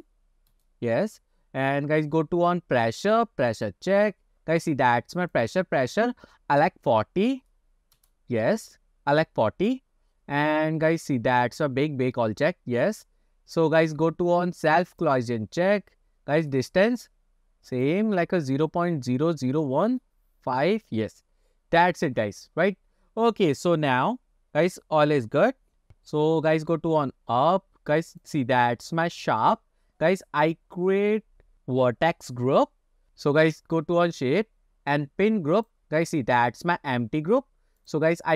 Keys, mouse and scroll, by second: 1.5-2.6 scroll down 6, 2.6-3.9 scroll up 2, 3.9 click, 5.4-8.4 drag, 10.3-11.2 scroll down 5, 13.3-15.2 scroll down 3, 15.2-16.2 drag, 16.2 scroll down 1, 16.5-17.2 scroll up 1, 17.2-17.8 scroll down 2, 17.8-20.2 drag, 26.6-27.5 scroll up 4, 27.5-28.3 scroll down 1, 28.3 click, 28.7 scroll down 2, 35.6-38.0 drag.